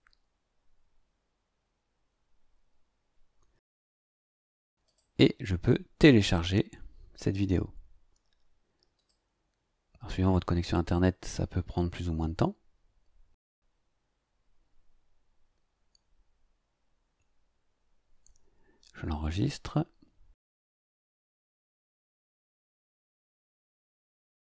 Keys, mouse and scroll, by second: 4.8 click, 6.3 click, 8.9 click, 19.5 click, 22.9 click, 24.2 click.